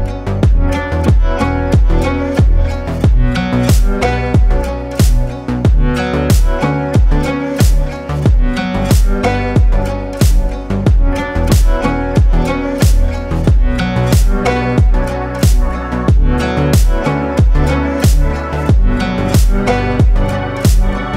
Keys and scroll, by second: 2.5 a, 9.4 ctrl+b, 16.5 Tab.